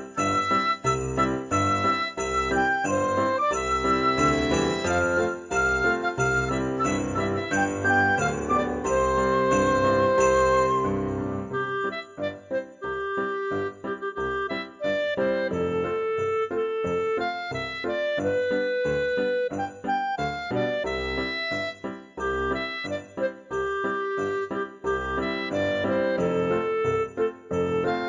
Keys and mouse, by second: 0.8 click, 1.1 x, 1.3 click, 2.3 g, 2.5 x, 4.1 click, 5.2 shift+d, 5.5 x, 6.2 click, 6.7 x, 7.9 click, 8.1 shift+d, 8.2 x, 9.2 click, 9.7 shift+middle click, 9.9 click, 10.7 shift+d, 10.8 x, 11.6 right click, 11.8 ctrl+z, 12.1 click, 12.7 shift+d, 12.9 x, 13.8 click, 14.4 shift+d, 14.5 x, 15.4 click, 15.7 z, 16.1 click, 16.3 alt+z, 16.7 x, 17.3 click, 17.9 g, 18.0 x, 18.3 click, 18.5 alt+z, 18.7 click, 19.2 alt+z, 19.4 g, 19.5 x, 20.1 click, 20.5 shift+d, 20.7 x, 21.8 click, 22.1 shift+d, 22.3 x, 23.9 click, 24.8 middle click, 26.1 middle click, 26.9 shift+middle click, 27.9 F6.